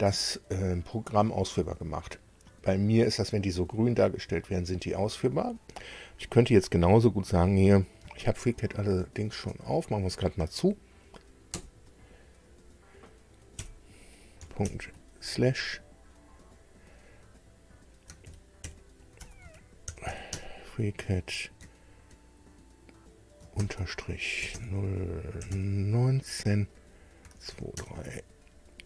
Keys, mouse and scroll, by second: 8.4 alt+Tab, 9.2 alt+Tab, 9.5 alt+Tab, 11.6 alt+F4, 13.6 ., 14.6 shift+7, 16.5 click, 18.2-20.6 typing, 23.6 shift+-, 24.4 0, 24.6 Tab, 25.4 9, 25.5 Tab, 27.0-28.0 typing.